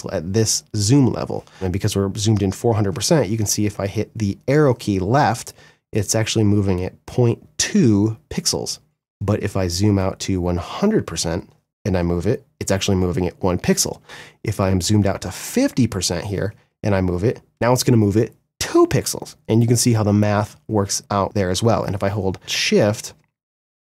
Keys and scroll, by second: 2.7 Left, 11.2 Left, 11.7 Right, 12.8 Left, 15.8 Left, 16.3 Right, 22.4 shift+Right, 22.7 shift+Left, 23.2 shift+Right, 23.6 shift+Left.